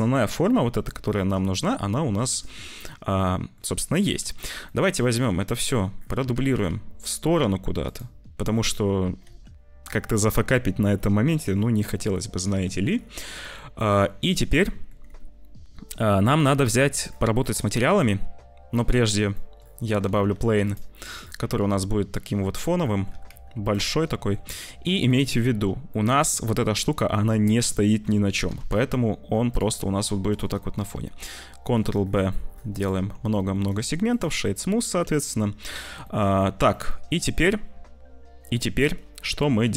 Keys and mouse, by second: 2.0 click, 3.2 click, 4.0 click, 4.2 ctrl+s, 4.6 click, 5.0 click, 6.6 shift+d, 9.2 ctrl+s, 12.6 ctrl+s, 13.4 click, 14.2 click, 14.5 click, 16.7 click, 17.8 shift+a, 19.3 click, 20.0 s, 21.5 s, 22.8 click, 23.0 g, 23.9 click, 24.4 Tab, 24.8 2, 25.8 click, 28.4 e, 29.7 click, 30.2 click, 30.7 click, 30.9 ctrl+b, 32.8 Tab, 33.3 middle click, 34.3 click, 36.0 click, 36.7-38.4 drag.